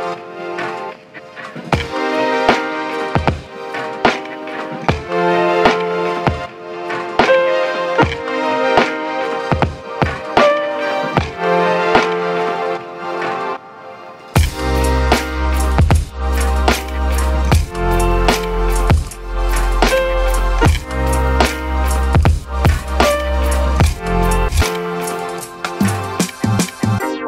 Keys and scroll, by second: 0.3-1.5 typing, 20.6 j, 20.8-21.1 j, 22.1 1, 22.2 Return, 22.8 ctrl+d, 25.5 ctrl+d, 26.6 ctrl+1.